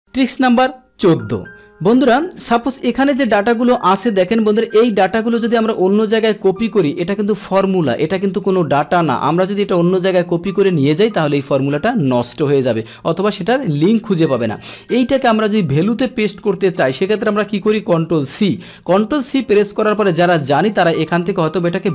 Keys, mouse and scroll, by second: 2.4 click, 3.3 click, 3.9 click, 5.1 click, 9.6 click, 15.8-16.8 drag, 18.4 ctrl+c, 20.8 click.